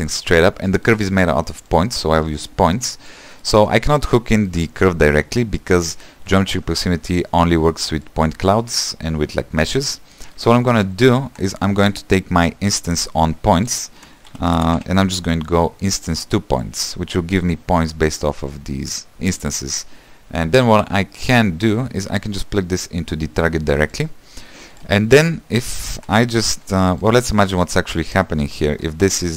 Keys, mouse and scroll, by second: 2.2-16.8 drag, 16.8 shift+a, 19.1-29.3 drag.